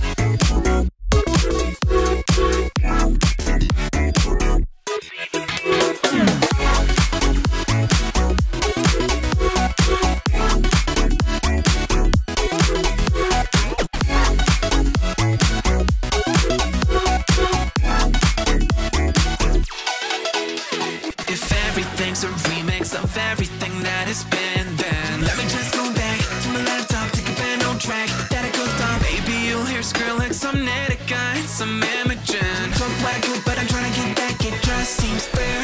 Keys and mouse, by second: 0.0 click, 2.5 g, 4.8 click, 6.0-7.9 drag, 8.2 `, 9.1 `, 10.3 click, 11.1 click, 11.7 `, 12.9 click, 14.5 click, 14.7 x, 15.7-16.7 drag, 17.8 shift+click, 18.1 z, 18.8 1, 19.4 click, 20.1 click, 21.8-24.0 drag, 25.4 click, 26.7 click, 27.5 click, 28.0 click, 29.0 click, 29.6-31.0 drag, 31.5 click, 32.0 click, 32.9 shift+click, 34.2 click, 35.4 click.